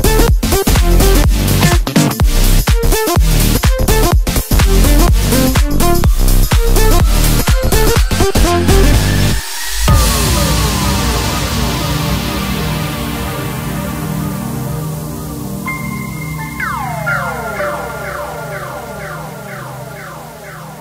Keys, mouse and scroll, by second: 0.2 click, 0.9 middle drag, 1.2-1.8 scroll down 1, 1.8 KP_1, 2.3 Tab, 3.8 ctrl+r, 8.2-9.7 drag, 9.7-10.8 scroll down 1, 10.8 s, 12.9-14.3 scroll up 4, 14.3 s, 17.5 Tab, 17.9-19.9 scroll down 2, 19.9 click, 20.3 scroll down 1, 20.5-20.8 middle drag.